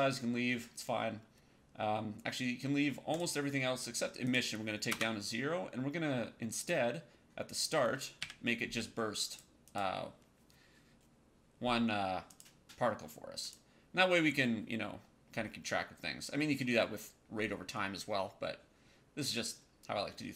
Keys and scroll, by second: 4.8 KP_0, 8.1 KP_1.